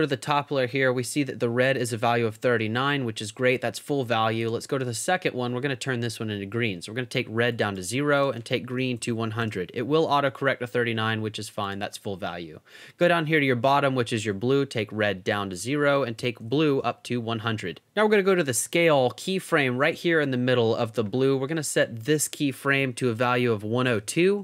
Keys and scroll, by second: 8.6-9.5 typing, 16.0-16.9 typing, 22.8 i, 23.1 o, 23.9 2, 24.0 Return.